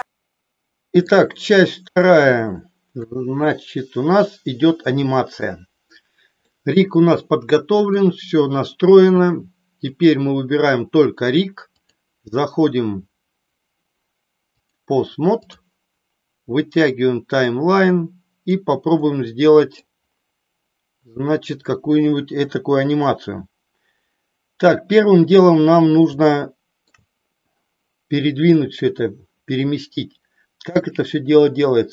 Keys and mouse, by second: 0.0-1.1 middle drag, 2.0-3.1 shift+middle drag, 3.6-5.5 middle drag, 6.5-8.0 middle drag, 9.8 click, 11.7-13.5 drag, 14.6-15.6 drag, 17.6-18.6 drag, 19.0 middle click, 26.2 shift+middle click.